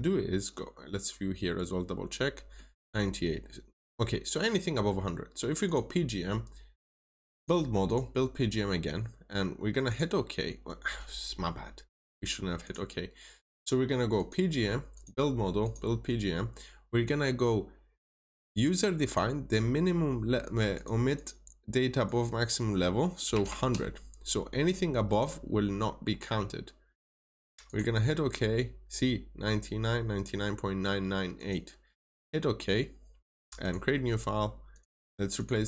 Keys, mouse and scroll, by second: 0.6 scroll up 1, 2.1 middle click, 2.6 scroll down 1, 3.4 middle click, 4.2 scroll down 1, 5.6 click, 21.1 double click, 22.0 click, 23.2 typing, 25.0 click.